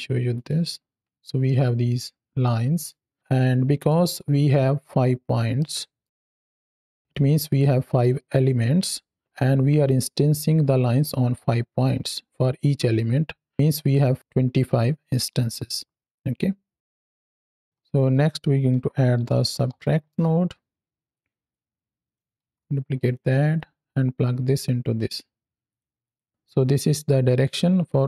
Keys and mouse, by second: 0.2 ctrl+shift+click, 1.3-2.7 middle drag, 3.3-3.7 middle drag, 5.4-5.9 middle drag, 16.8 drag, 17.1 click, 17.6 click, 17.6 ctrl+z, 17.6 x, 18.0 click, 21.0-22.0 drag, 22.3 shift+d, 22.9 click, 23.4-24.8 drag, 25.6 click, 25.9 click, 26.2-27.4 drag.